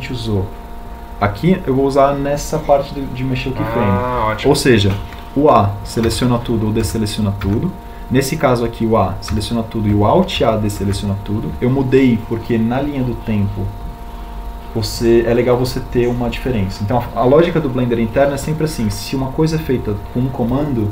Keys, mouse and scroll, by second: 7.4 a, 10.3 a, 12.9 a.